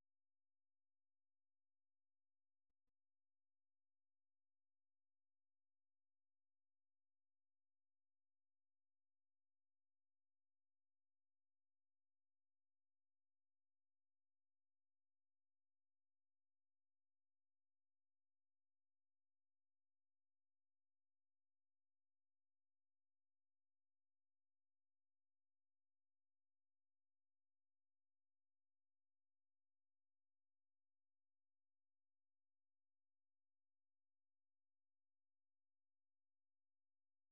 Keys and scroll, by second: 19.7 d, 30.2-31.4 typing, 36.2-37.0 typing.